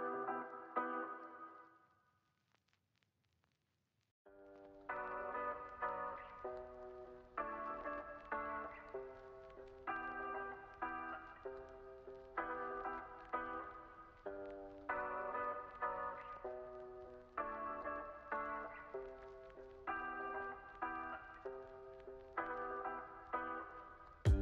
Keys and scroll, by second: 3.8-4.7 typing, 6.6 z, 7.3 x, 8.0 z, 9.8 x, 12.0 super+c, 12.2 super+v, 13.6 super+c, 13.8 super+v, 14.2 x, 16.9 super+c, 17.0 super+v, 18.3 x, 19.3 z, 19.9 x, 22.1 super+s, 22.8 space, 24.3 super+=.